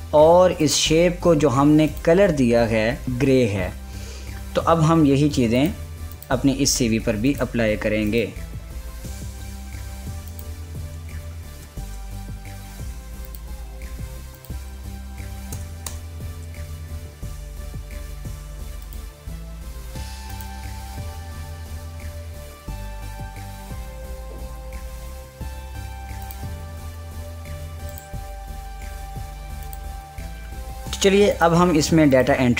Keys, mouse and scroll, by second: 2.0 click, 6.3 click, 7.0 click, 10.9 click, 11.9-12.7 typing, 13.9 click, 15.3 ctrl+a, 19.5 click, 26.9 click.